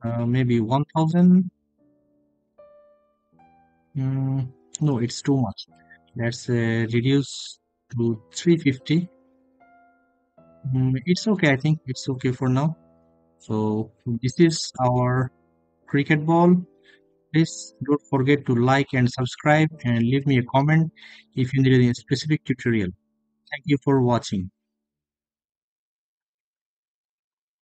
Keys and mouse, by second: 3.7-6.6 drag, 9.7 middle drag.